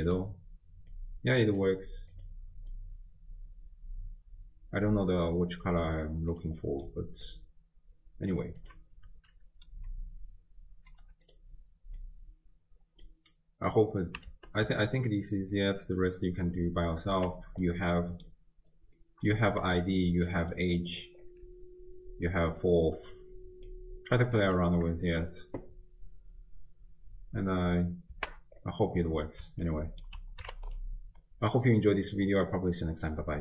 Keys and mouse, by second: 0.1 click, 0.9-1.6 drag, 2.1 click, 6.3 click, 6.6 middle click, 7.3-8.3 drag, 8.6-11.3 drag, 12.0-13.1 drag, 14.4 shift+space, 17.4 space, 17.7 click, 19.1 click, 19.6 d, 19.8 click, 20.3 d, 20.4 d, 20.6 middle click, 21.5-23.6 d, 22.6 click, 23.7 click, 24.4 d, 24.5 d, 28.2 shift+space, 29.7 ctrl+middle click, 30.0 ctrl+click.